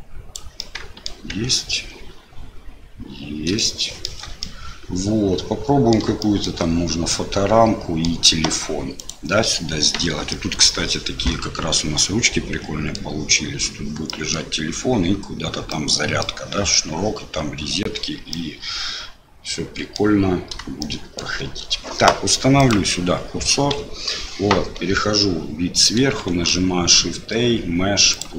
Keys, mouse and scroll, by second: 0.7 middle click, 1.3 Tab, 2.9 click, 3.5 shift+middle click, 4.4-6.0 middle drag, 6.2 shift+middle click, 7.1 middle click, 9.0 click, 10.3 middle click, 12.0-13.0 middle drag, 14.1 middle click, 15.7 middle click, 18.3-20.0 middle drag, 20.8 shift+middle click, 22.5 click, 23.8 KP_7, 26.2 shift+a.